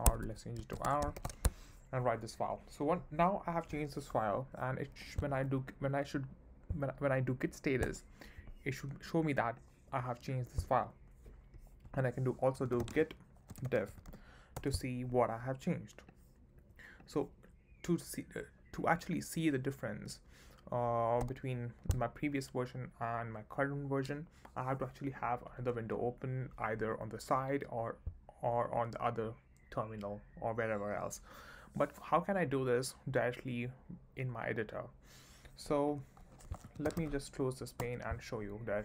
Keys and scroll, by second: 0.1 Escape, 0.5-1.3 typing, 5.6 Up, 7.8 Return, 12.3-14.4 typing, 14.5 Return, 21.2 q, 36.2-37.5 typing, 37.8 Return.